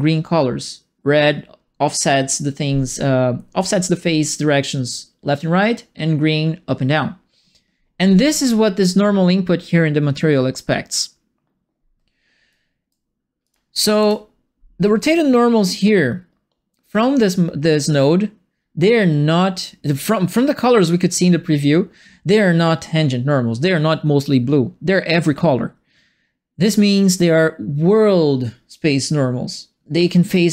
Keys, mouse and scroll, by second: 12.5 right click, 13.4 click, 13.9 Delete, 15.0 click.